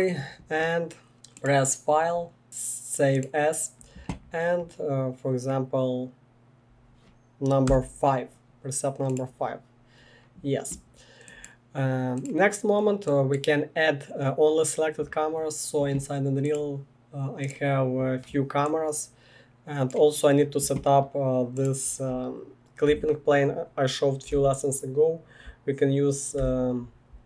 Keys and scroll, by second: 7.6 5, 24.3 r, 26.4 typing.